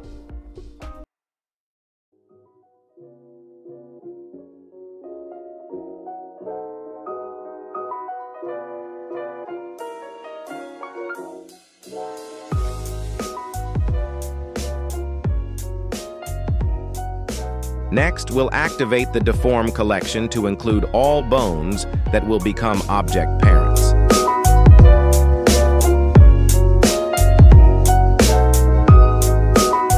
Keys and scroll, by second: 4.5 ctrl+s, 12.9 ctrl+Tab, 16.2 /.